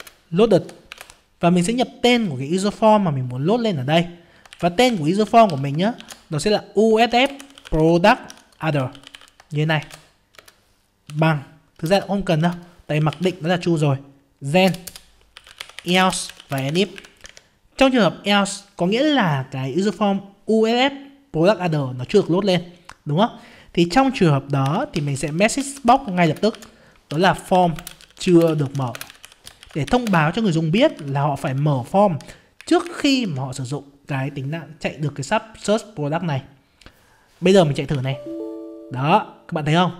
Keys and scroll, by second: 0.0 ctrl+space, 38.0 F5.